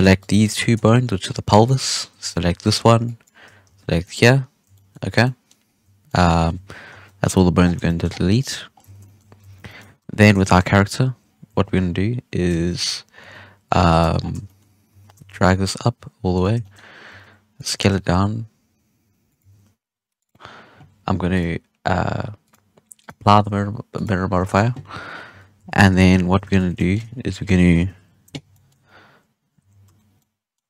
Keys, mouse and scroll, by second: 0.1 shift+right click, 0.5-1.2 shift+middle drag, 1.2 scroll up 1, 1.6-3.3 shift+drag, 3.6 x, 4.7-5.0 shift+middle drag, 5.0 scroll down 1, 5.2-5.6 middle drag, 5.6-6.0 scroll down 1, 6.0-6.9 shift+middle drag, 6.9 KP_1, 7.2 Tab, 7.5 scroll down 7, 7.8 shift+middle drag, 8.0-8.3 scroll up 5, 8.3 right click, 8.7 scroll down 2, 8.8 Tab, 9.0 shift+middle drag, 9.2 scroll up 1, 9.4 alt+a, 9.6-10.0 shift+middle drag, 10.0 1, 10.1 scroll up 1, 10.3 shift+middle click, 10.7-11.2 scroll up 3, 11.2 scroll down 2, 11.5 Tab, 12.3-13.2 scroll down 2, 13.2 Tab, 13.8 alt+a, 14.0 Tab, 14.1 scroll down 2, 14.4-14.9 shift+middle drag, 14.9 g, 16.5-17.0 shift+middle drag, 17.0 s, 17.6 g, 20.4-21.3 scroll up 1, 21.3-24.3 drag, 24.3 scroll up 1, 24.4-25.2 shift+middle drag, 25.2 KP_1, 25.5 Tab, 25.9 shift+middle drag, 26.1 scroll up 5, 26.3 alt+a, 26.5 1, 26.7-27.1 middle drag, 27.1-27.8 scroll up 1, 27.8 KP_1, 28.5-28.8 shift+middle drag, 28.8-29.6 scroll up 3, 29.6 z, 29.8 3, 30.0 scroll down 1, 30.1-30.6 middle drag.